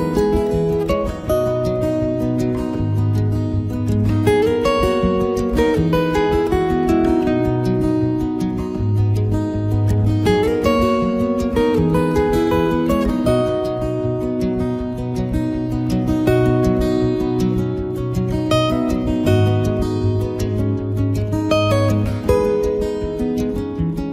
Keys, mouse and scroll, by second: 0.2 click, 0.2 f, 1.5 click, 2.0 click, 2.0 middle click, 2.4 ctrl+right click, 2.7 right click, 3.1 click, 3.5 f, 3.7 click, 4.3 ctrl+right click, 4.5 shift+right click, 4.7 right click, 4.8 click, 5.4 click, 5.8 middle click, 6.1 right click, 6.3 ctrl+right click, 6.4 click, 7.4 click, 7.4 right click, 7.7 click, 8.2 click, 8.3 middle click, 8.6 ctrl+middle click, 8.7 middle click, 9.0 middle click, 9.2 ctrl+middle click, 9.2 ctrl+middle click, 9.4 ctrl+right click, 9.6 right click, 9.9 click, 10.3-11.2 click, 10.9 click, 11.9 middle click, 12.2 ctrl+middle click, 12.4 middle click, 12.6 shift+middle click, 12.8 ctrl+middle click, 13.0 middle click, 13.1 shift+middle click, 13.4 middle click, 13.9 middle click, 14.1 ctrl+middle click, 14.2 ctrl+middle click, 14.4 ctrl+right click, 15.2 ctrl+right click, 15.2 shift+right click, 15.5 shift+right click, 15.5 right click, 15.9 click, 16.6 ctrl+right click, 16.8 shift+right click, 16.9 right click, 17.1 click, 17.7 click, 17.9 ctrl+right click, 18.0 shift+right click, 18.2 click, 18.7 ctrl+right click, 18.9 shift+right click, 19.0 right click, 19.2 right click, 19.2 click, 19.5 shift+right click, 19.5 click, 19.7 ctrl+right click, 19.9 shift+right click, 20.2 click, 21.6 middle click, 22.2 middle click, 22.3 ctrl+middle click, 22.4 ctrl+middle click, 22.4 middle click, 22.7 middle click, 22.9 shift+middle click, 23.0 shift+middle click, 23.2 middle click, 23.3 ctrl+middle click, 23.8 ctrl+right click.